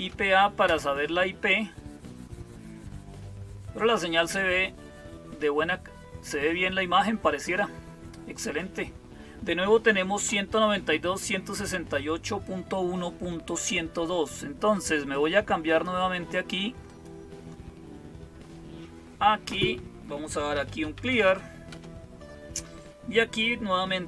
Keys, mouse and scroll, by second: 15.5 click, 16.7 click, 20.1-21.5 typing, 21.6 Return.